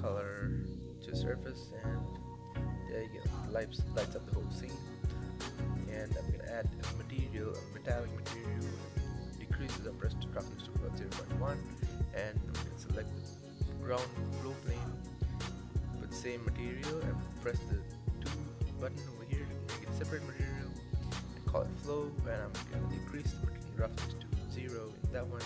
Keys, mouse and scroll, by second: 2.5 click, 4.3 click, 4.9-9.5 drag, 10.0 click, 11.4 click, 12.3-14.2 shift+middle drag, 14.2-16.2 drag, 18.8-20.9 drag, 20.9 o, 22.1-24.1 drag, 24.3 click.